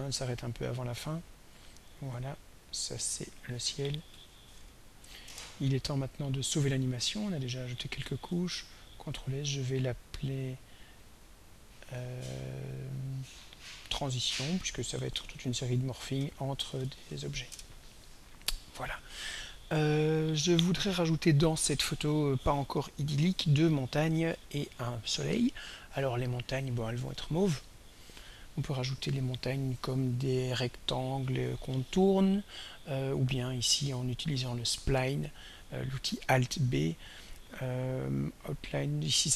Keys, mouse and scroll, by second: 2.9 click, 4.1 ctrl+a, 4.5 ctrl+s, 4.6 ctrl+k, 5.0 z, 5.3 Return, 7.3 click, 8.3 ctrl+s, 10.6-11.3 drag, 11.8-13.2 drag, 14.1 click, 14.8-17.6 typing, 27.1 click, 35.2 click.